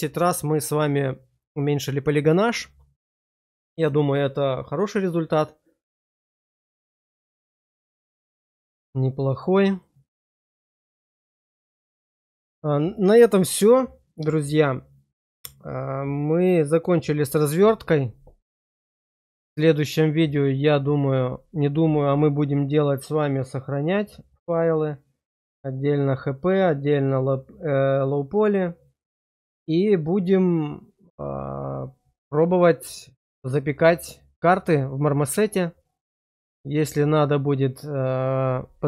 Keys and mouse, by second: 9.7-11.1 middle drag, 11.4 shift+middle click, 11.9 middle click.